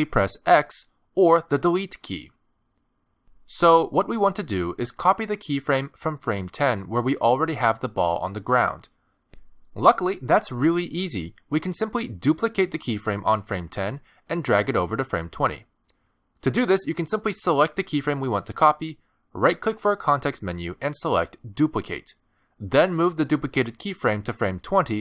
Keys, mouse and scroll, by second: 7.4 click, 9.4 click, 10.2 middle click, 11.5 middle click, 14.0 click, 18.1 right click.